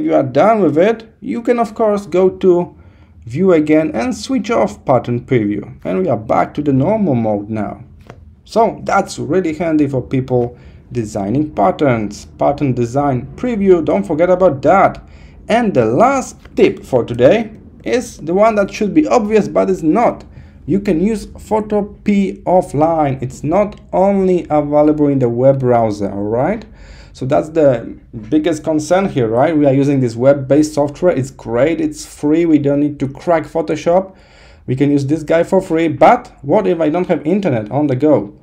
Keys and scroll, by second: 17.6 super+0.